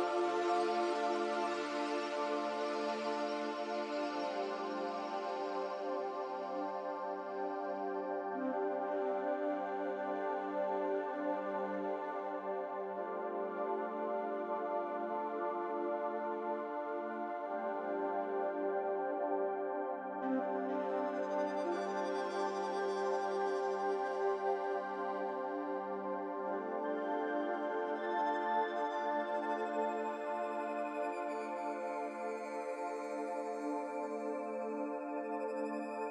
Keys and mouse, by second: 2.7 click, 4.4 click, 4.9 click, 5.6 click, 6.1 click, 6.4 click, 6.7 click, 7.1 click, 7.5 click, 12.8-13.9 middle drag, 18.8 click, 24.7-27.6 drag, 31.4-33.3 middle drag, 34.4-36.1 middle drag.